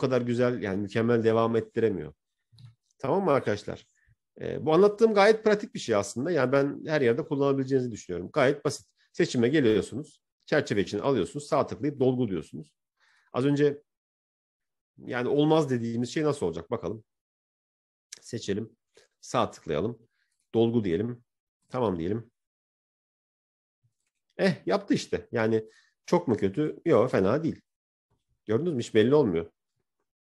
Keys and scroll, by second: 6.5 ctrl+-.